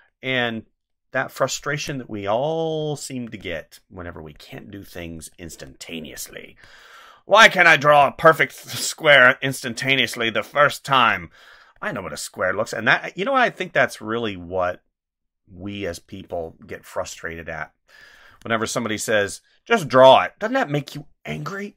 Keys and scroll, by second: 1.7 space, 3.2 space, 6.5 space, 7.9 space, 10.8 space, 15.7 space, 18.3 space.